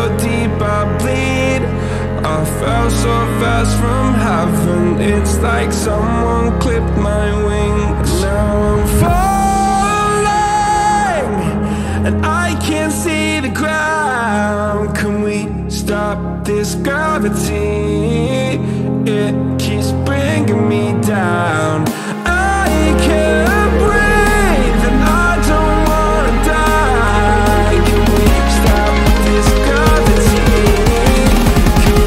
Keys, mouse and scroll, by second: 1.2-7.2 middle drag, 7.2 click, 12.1-26.9 drag, 29.9-31.0 drag.